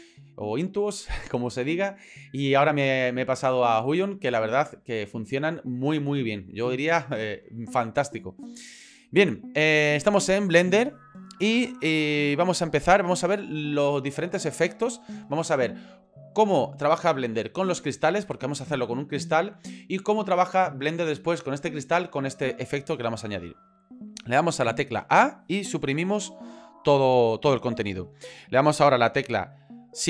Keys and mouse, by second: 12.4 middle click, 13.5 shift+middle click, 25.0 a, 25.9 Delete, 26.9 middle click.